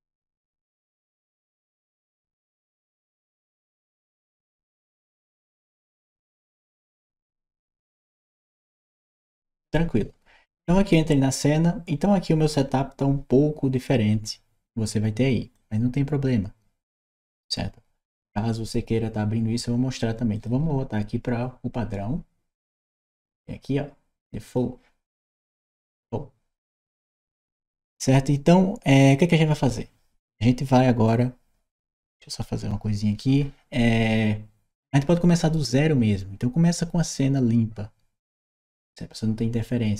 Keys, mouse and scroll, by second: 15.3-17.0 drag, 20.1 click, 24.2 click, 27.0 middle click, 28.9 click, 30.9-33.0 drag.